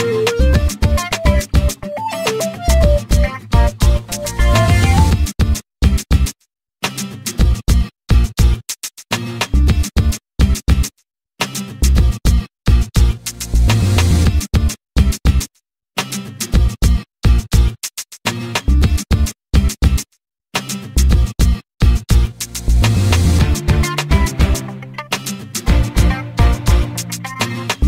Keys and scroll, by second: 20.0 8, 21.2 BackSpace, 22.2 Return, 26.0 p.